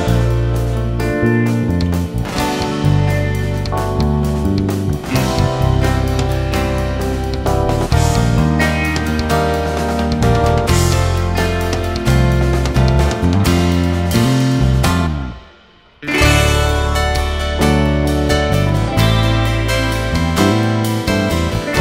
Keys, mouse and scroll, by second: 1.8 click, 6.3 shift+middle click, 6.8-7.2 scroll up 2, 7.2 alt+a, 7.8 click, 8.0 scroll up 2, 8.3-9.3 shift+middle drag, 9.3 alt+a, 9.8 click, 11.4 click, 12.3 e, 13.3-14.1 scroll up 2, 15.0 s, 20.8 alt+a, 21.0-21.8 scroll down 6.